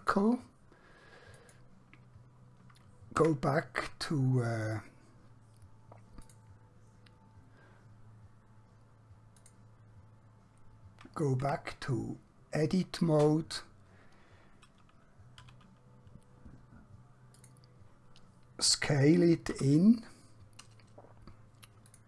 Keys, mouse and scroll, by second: 3.2 Tab, 6.2 click, 9.4 click, 11.5 Tab, 15.4 a, 17.4 click, 19.6 s, 21.9 click.